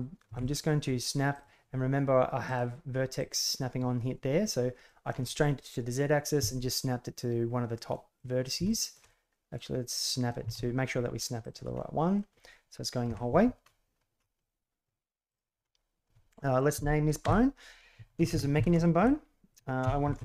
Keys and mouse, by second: 0.2 g, 2.4-3.6 drag, 4.8 shift+middle click, 7.9 middle click, 8.6-8.9 shift+middle drag, 9.0-9.5 middle drag, 10.0 middle click, 10.4 g, 11.7 middle click, 13.0 KP_3, 14.3-14.8 middle drag, 15.2 middle click, 17.2 F2.